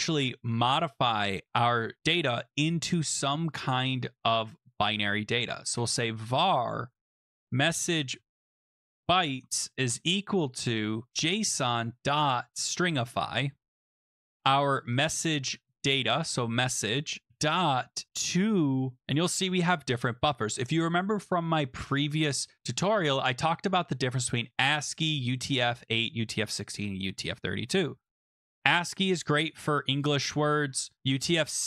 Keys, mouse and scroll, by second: 5.1-13.1 typing, 14.4-18.6 typing, 20.5 click, 20.6 click, 20.7 click, 20.7-21.6 scroll, 22.0-22.6 scroll, 24.4-25.2 scroll, 28.0-29.3 scroll, 30.3-31.6 scroll.